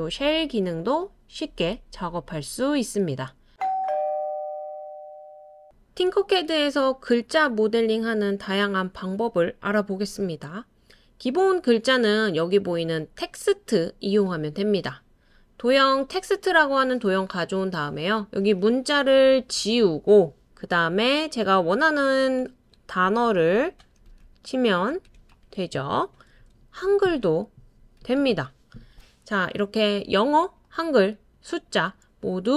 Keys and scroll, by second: 19.2-19.8 typing, 21.7-28.8 typing.